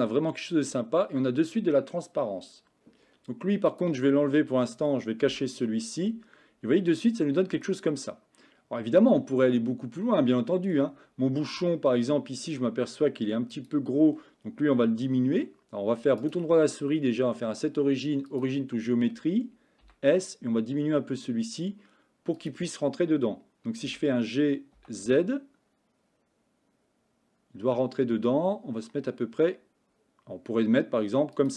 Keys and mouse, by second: 3.8 click, 6.2-7.8 middle drag, 9.6-10.8 shift+middle drag, 11.7-12.6 shift+middle drag, 13.6 click, 19.9 s, 23.9 g.